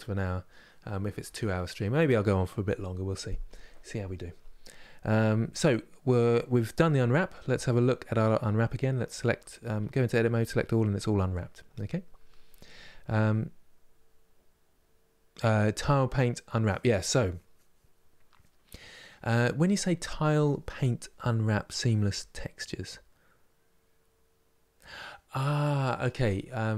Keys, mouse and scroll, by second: 9.3 Tab, 9.8 a.